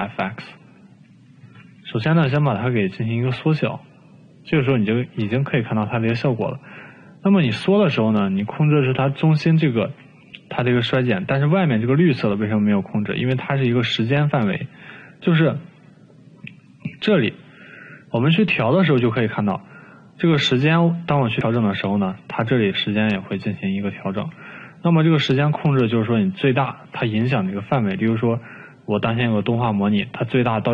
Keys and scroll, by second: 2.2 t, 2.7 t, 2.9 t, 5.7 typing, 23.2 ctrl+z, 25.4 ctrl+z.